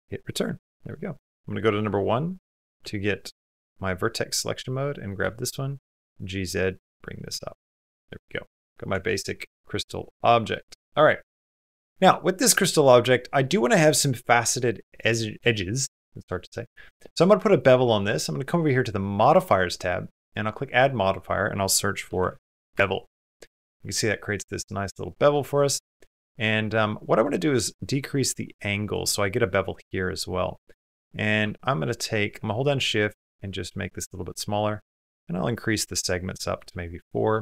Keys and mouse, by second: 0.2 middle click, 3.2 1, 4.0 click, 4.4 middle click, 5.0 g, 6.8 middle click, 7.2 g, 7.7 shift+middle click, 8.0 middle click, 8.7 Tab, 9.2 middle click, 10.2 middle click, 10.7 shift+middle click, 10.9 middle click, 11.4 middle click, 11.8 shift+middle click, 12.5 shift+middle click, 12.7 middle click, 14.5 middle click, 15.0 shift+middle click, 16.2 click, 19.0 click, 20.0-21.9 drag, 23.6-24.9 middle drag, 24.9 click, 26.8 click, 27.3-28.7 drag, 31.2-33.7 shift+middle drag, 34.5 middle click, 35.4 middle click, 36.1 middle click, 36.9 shift+middle click.